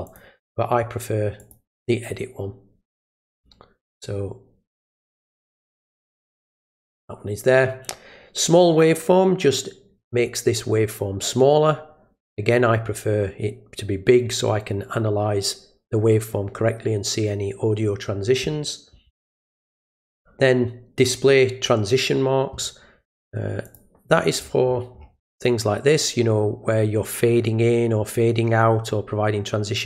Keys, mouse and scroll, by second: 0.1 click, 1.4 click, 5.1 click, 6.0 click, 6.4 click, 23.7 click, 24.1-29.8 scroll down 8.